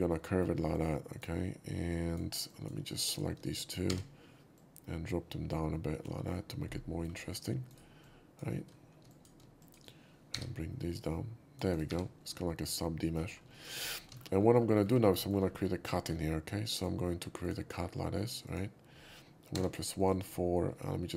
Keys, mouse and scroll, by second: 0.2 middle drag, 0.7-1.2 drag, 0.9 z, 1.9 click, 2.5 drag, 3.0 shift+click, 3.9 g, 4.5-6.0 drag, 6.2 middle click, 7.7 right click, 8.0 drag, 9.1 shift+click, 9.6 shift+click, 10.3 g, 10.9 click, 11.7 right click, 11.9 2, 12.2 middle click, 13.5 shift+middle click, 14.0 alt+shift+middle click, 14.4 alt+middle drag, 14.7 alt+middle click, 15.0 scroll up 1, 15.2 shift+middle click, 15.4 scroll down 1, 15.9 shift+middle click, 16.7 shift+click, 17.4 shift+click, 18.4 shift+click, 19.0 scroll up 1, 19.6 1, 20.0 click, 20.1 click.